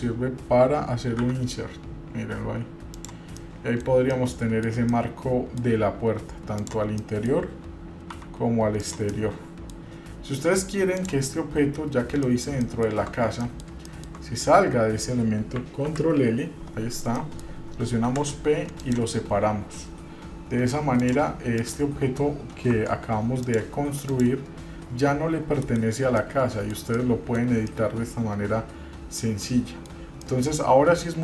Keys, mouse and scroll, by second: 3.6 middle click, 4.0 scroll down 1, 4.3 middle click, 5.1 middle click, 6.8 click, 7.2 middle click, 8.3 i, 9.3 middle click, 11.2 click, 12.4 middle click, 12.7 shift+middle click, 13.6 middle click, 14.1 shift+middle click, 16.0 ctrl+l, 17.4 middle click, 18.1 p, 21.2 click, 21.8 click, 22.9 Tab, 23.6 click, 24.3 click, 26.4-26.9 middle drag, 27.0 scroll down 1, 27.1-27.6 middle drag, 27.6 scroll down 1, 27.9-30.1 middle drag, 30.4 middle click.